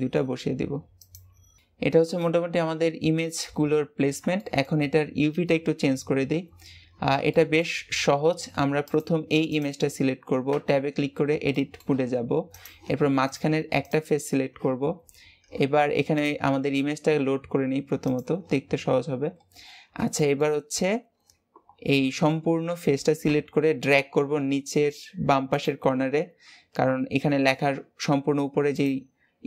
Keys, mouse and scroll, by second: 1.6-4.2 shift+middle drag, 4.2 shift+scroll up 1, 4.3-7.8 shift+middle drag, 7.8 scroll up 1, 8.8 click, 9.4 click, 10.4 Tab, 10.8 scroll up 4, 11.4-12.4 shift+middle drag, 12.4 click, 13.2 click, 15.0-16.0 scroll up 1, 16.0 click, 18.6 scroll down 4, 19.3 scroll up 2, 20.0-23.1 shift+middle drag, 23.1 g.